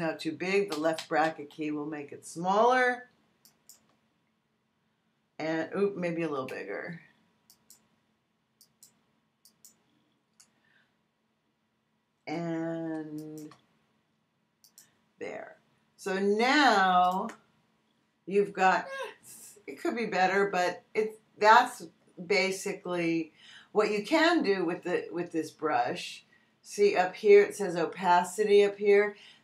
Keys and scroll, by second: 0.7 [, 6.2 ].